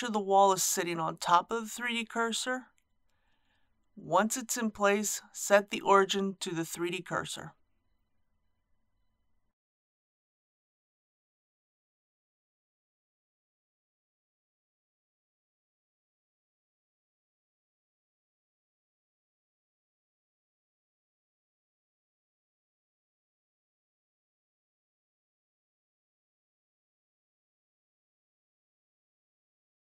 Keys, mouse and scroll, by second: 0.7-1.4 scroll down 1, 4.1 right click, 6.9-8.0 drag, 8.0 scroll down 1, 8.8-9.9 middle drag.